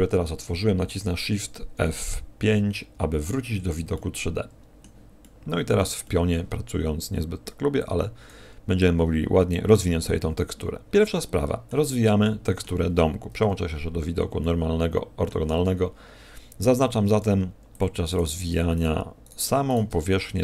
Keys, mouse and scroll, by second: 2.7 shift+F5, 3.9 middle click, 5.2 middle click, 6.0 middle click, 7.8 click, 10.6 scroll up 4, 10.9 middle click, 12.0 middle click, 13.4 KP_5, 14.4 middle click, 16.7 ctrl+Tab, 18.0 right click, 18.7 shift+right click, 19.2 right click, 19.6 shift+right click, 19.9 middle click.